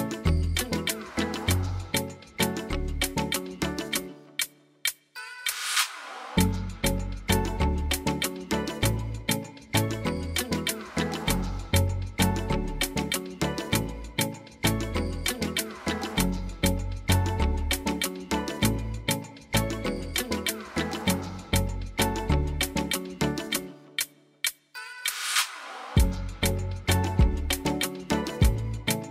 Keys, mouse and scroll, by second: 2.8 click, 6.6 click, 15.2 click, 17.7 click, 20.8 click, 22.5 click, 23.5 click.